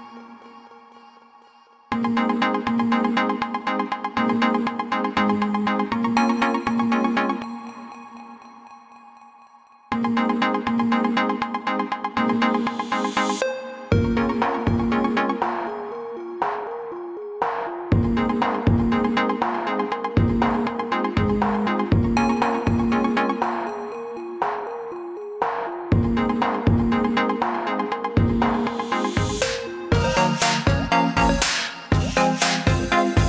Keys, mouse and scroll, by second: 0.6-0.9 alt+scroll down 1, 1.6-3.0 scroll down 1, 3.8 click, 10.2 alt+click, 15.7 click, 18.9 click, 20.5 click, 24.1 click, 30.8 click, 32.9 click.